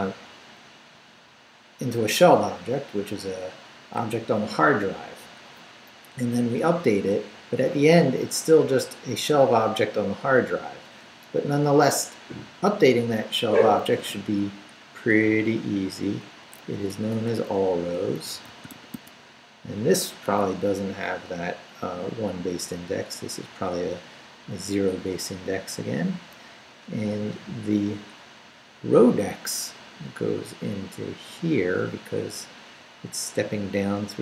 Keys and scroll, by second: 11.8 Up, 14.2 Down, 16.4 Down, 16.9-19.4 typing, 26.7 [.